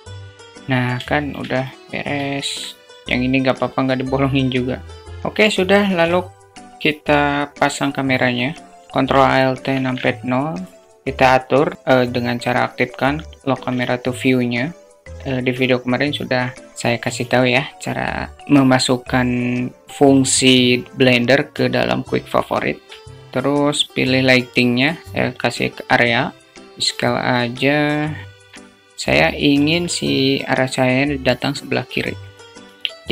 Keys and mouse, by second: 0.1 Tab, 0.1 click, 0.3 Tab, 0.5 alt+shift+/, 0.5 alt+shift+middle click, 1.6-3.0 middle drag, 3.0-5.0 drag, 5.1 shift+a, 8.9 ctrl+alt+KP_0, 9.9 q, 13.3 alt+shift+middle click, 13.9 alt+shift+click, 14.4 alt+middle click, 16.7 q, 22.9 shift+a, 25.5 click, 26.7 s, 27.5 alt+middle click, 28.8 click, 29.0 alt+middle click, 29.5 s, 31.4 alt+middle click, 32.6 shift+d.